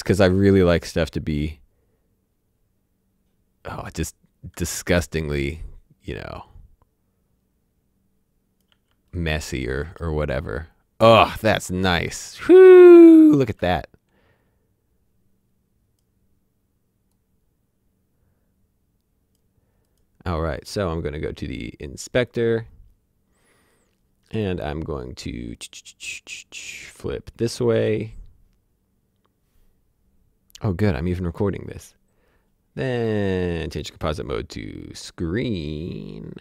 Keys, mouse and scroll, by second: 1.4 click, 9.1 space, 13.4 space, 13.6 click, 22.2 click, 26.9 click, 33.8 click, 36.1-36.4 scroll down 1.